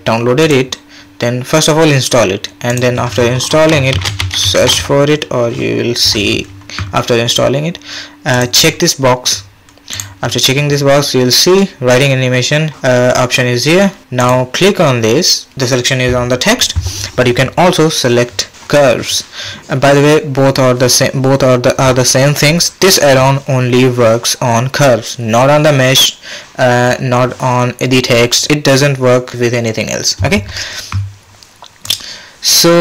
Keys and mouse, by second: 14.2-27.1 drag, 31.8-32.8 drag.